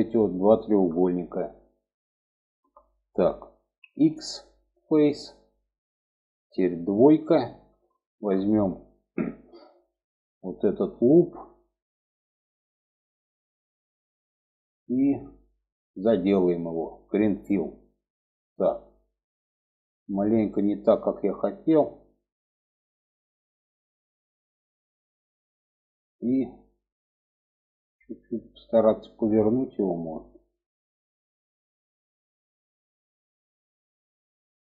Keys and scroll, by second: 3.2 x, 6.4 2.